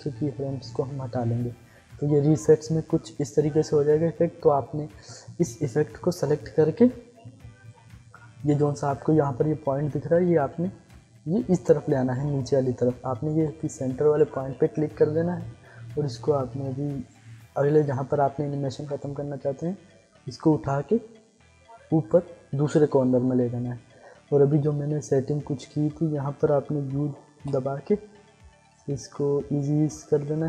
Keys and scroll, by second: 27.3 u.